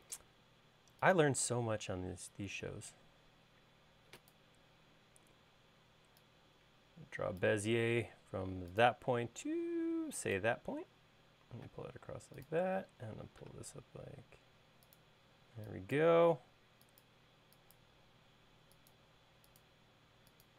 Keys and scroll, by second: 0.0-0.1 typing, 15.5 e, 18.2 |.